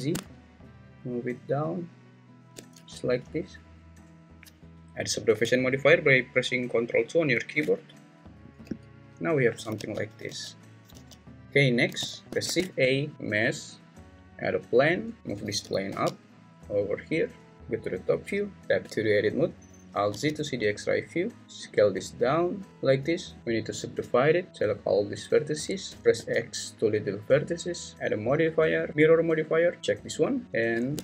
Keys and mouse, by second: 2.4 shift+click, 2.7 Tab, 7.4 ctrl+2, 8.6 `, 9.8 alt+z, 10.3 alt+z, 10.9 z, 11.4 alt+z, 12.0 alt+z, 12.3 `, 12.4 shift+a, 15.6 g, 15.9 z, 17.5 `, 18.6 Tab, 20.1 alt+z, 21.4 s, 23.4 right click, 24.5 click, 24.5 1, 25.8 x, 26.0 ctrl+z, 26.1 x, 27.9-29.8 drag.